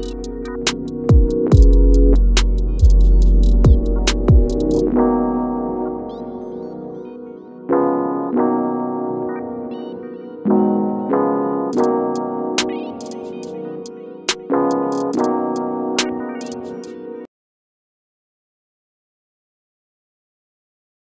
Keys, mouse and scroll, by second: 3.3 click, 4.4-4.7 scroll down 1, 8.2-14.4 drag, 14.5 click, 15.7 F9.